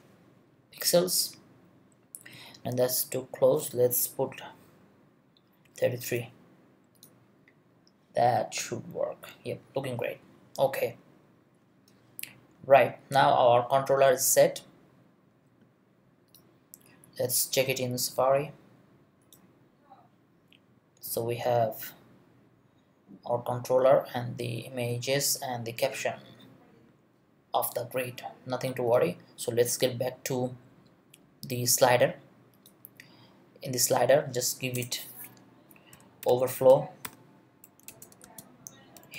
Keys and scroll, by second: 4.1 BackSpace, 5.6 3, 34.8 Return, 35.9 o, 36.2 b, 36.7 BackSpace, 37.0 v, 37.9 Return, 38.2-39.1 typing.